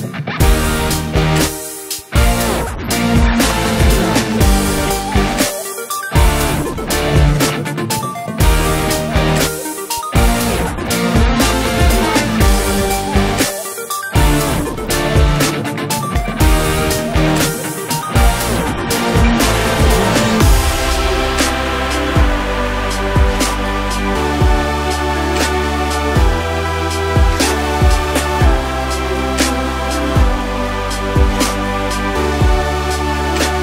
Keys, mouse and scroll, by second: 1.0 z, 4.5-4.8 scroll down 1, 5.2-11.2 shift+middle drag, 5.2 scroll up 2, 5.8 scroll up 2, 11.2 click, 11.6 KP_Decimal, 11.8-12.8 middle drag, 11.8 scroll down 2, 12.8 click, 13.1 Tab, 13.4-15.5 middle drag, 14.9 scroll up 1, 15.1 Tab, 15.5 click, 15.7-19.3 middle drag, 17.9 shift+d, 18.3 Return, 19.3 click, 19.6 click, 19.9 click, 20.2 Tab, 21.4 KP_7, 22.3 k, 26.9 Escape, 28.4 ctrl+r, 30.9 click, 31.6 k.